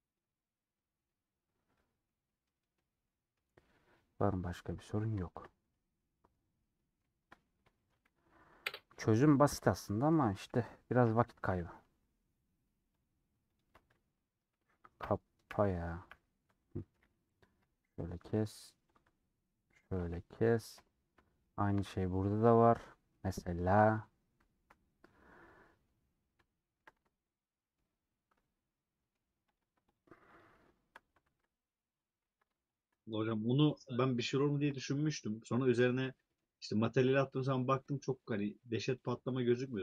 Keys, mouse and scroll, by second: 1.5 scroll down 5, 1.7-5.8 middle drag, 5.8 Tab, 5.9 middle click, 6.3 scroll down 2, 6.5-8.3 middle drag, 8.3 /, 9.8-11.0 middle drag, 11.0 /, 11.4 middle click, 11.9 Tab, 12.3 click, 13.6 ctrl+click, 16.0 n, 16.8 middle click, 17.7 ;, 17.9 middle click, 18.4 3, 20.8 ;, 21.1 middle click, 21.5 2, 22.5-23.7 middle drag, 23.7 1, 23.8 click, 24.5 KP_Decimal, 25.1-26.6 scroll down 13, 26.6 shift+middle click, 26.9 alt+z, 27.0-29.6 middle drag, 29.8-31.3 shift+drag, 31.3 shift+x, 32.3 ctrl+z, 33.1-34.6 middle drag, 34.6 shift+x, 35.0 middle click, 35.8 scroll down 2, 36.1-37.5 middle drag, 37.6-39.0 shift+drag.